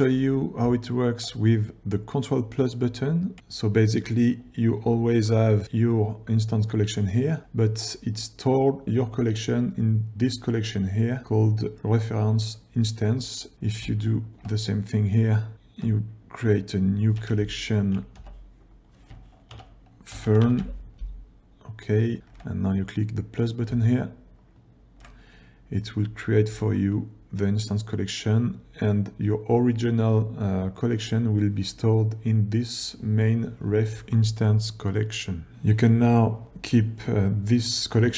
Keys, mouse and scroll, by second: 0.9 ctrl+scroll down 1, 5.0 g, 6.2 click, 8.1 click, 13.5 click, 14.3 shift+click, 14.9 scroll down 1, 15.5 ctrl+scroll down 1, 18.2 m, 22.2 ctrl+scroll down 1, 26.6 g, 35.5 click.